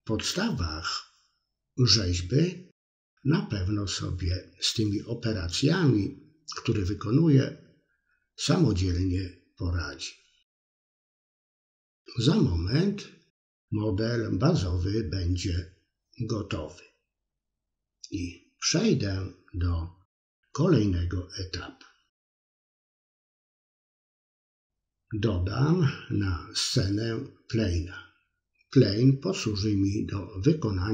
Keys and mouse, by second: 2.0-3.2 drag, 3.9 click, 4.2 click, 4.5 click, 4.9 click, 5.1 middle click, 6.2 click, 7.5 click, 8.6-10.2 drag, 10.2-11.8 middle drag, 12.0 middle click, 12.5 click, 13.5 middle click, 14.3-15.4 drag, 16.1 click, 17.0-19.0 middle drag, 19.2 KP_3, 19.5 middle click, 19.9 KP_7, 21.0-23.9 drag, 25.7 Tab, 26.5-27.7 drag, 28.5-30.2 drag.